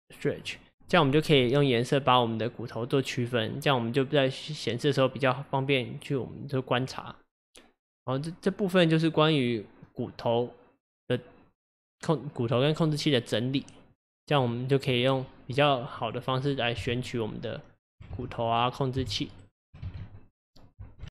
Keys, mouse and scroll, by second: 0.0-1.2 drag, 1.5-4.5 middle drag, 13.6-14.4 middle drag, 14.4 click, 15.3-15.8 scroll down 3, 15.8-16.8 middle drag, 16.8 g, 18.2 ctrl+z, 18.5 click, 19.1 g, 19.9 ctrl+z, 20.4-21.1 middle drag.